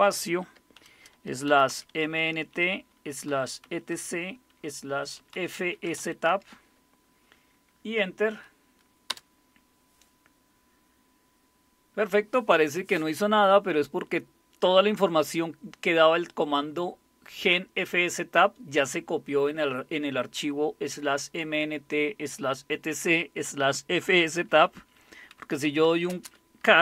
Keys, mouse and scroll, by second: 0.0-2.2 typing, 3.3-3.6 typing, 4.9-6.0 typing, 9.1 Return, 25.3-26.8 typing.